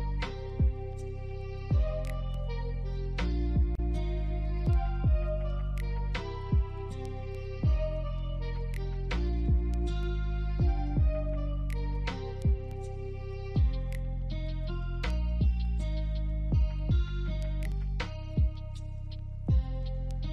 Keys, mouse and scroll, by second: 2.1 ctrl+click, 4.1 scroll down 1, 4.3 alt+middle click, 5.3 double click, 7.2 alt+middle click, 7.6-7.9 scroll up 1, 8.3 ctrl+click, 9.9 ctrl+click, 11.2 ctrl+click, 12.6 ctrl+click, 13.8 alt+middle click, 15.6 ctrl+click, 16.6 ctrl+click, 17.8 ctrl+z, 18.3 ctrl+click, 19.5 alt+middle click, 20.1 ctrl+click.